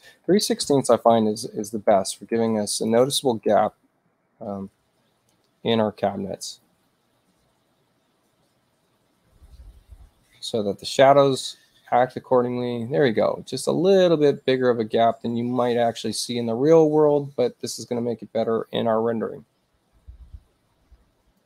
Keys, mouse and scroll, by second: 0.6 Return, 2.7 click, 21.4 click.